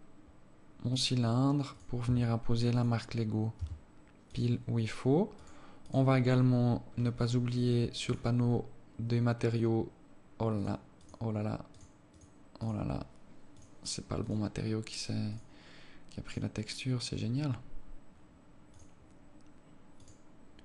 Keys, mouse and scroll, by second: 6.2 click, 7.3-8.0 scroll up 10, 8.4 click, 8.8-9.4 scroll up 1, 9.4 scroll up 1, 10.9 click, 11.4 click, 12.1 click, 12.5 click, 13.0 click, 13.9 click, 14.6 click, 15.6 click, 16.6 click, 18.1-19.0 scroll up 7, 19.0 click, 20.3 click.